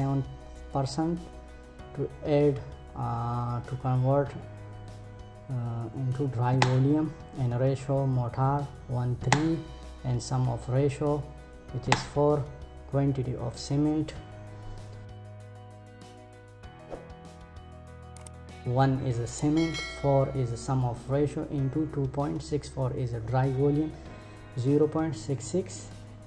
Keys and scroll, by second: 6.1 Return, 8.7 Return, 11.4 Return.